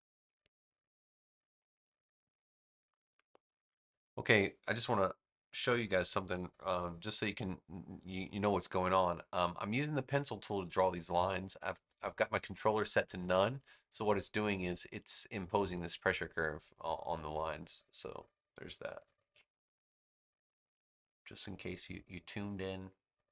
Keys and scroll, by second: 19.1 super+z.